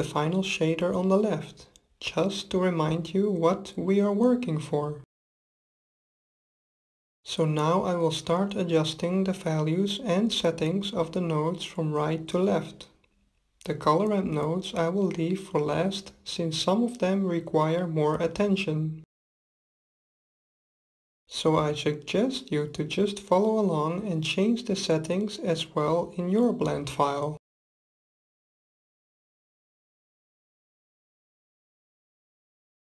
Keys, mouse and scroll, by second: 13.2-15.1 drag, 17.9-20.1 middle drag, 20.1-20.6 scroll up 1, 20.6-22.4 middle drag, 24.4-26.3 drag, 29.4-31.3 drag.